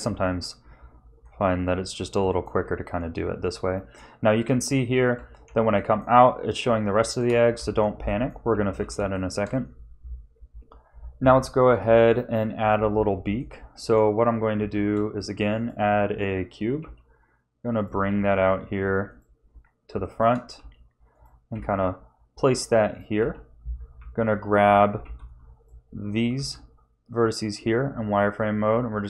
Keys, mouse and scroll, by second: 0.1 Tab, 0.7 scroll down 3, 1.2-1.6 scroll up 3, 2.2 middle click, 2.6 Tab, 5.1 Tab, 5.7 middle click, 7.0 shift+middle click, 7.5 Tab, 8.0 middle click, 8.6 ctrl+s, 9.1 shift+middle click, 11.8 KP_3, 13.4 shift+middle click, 14.6 shift+a, 16.7 g, 18.1 s, 19.4-19.8 scroll up 3, 20.0 shift+middle click, 20.5 s, 21.5 g, 23.2 a, 23.9 z, 25.0 b, 26.3 s.